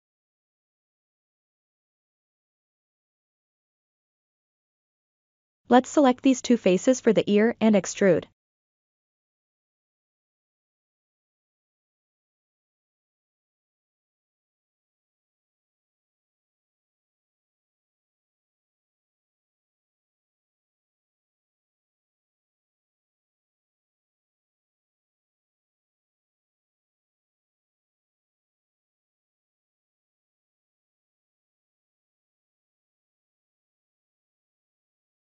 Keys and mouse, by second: 3.5 alt+z, 4.3 alt+z, 5.9 3, 6.2 click, 7.8 alt+z, 10.5-13.5 middle drag, 14.5 e, 16.1-18.0 middle drag, 20.3 s, 20.9-22.5 drag, 22.8-24.9 middle drag, 25.6 KP_1, 27.4 g, 27.8-29.0 drag, 29.3-30.8 middle drag, 31.9 ctrl+z, 33.0 click, 34.2 middle click, 34.6 s.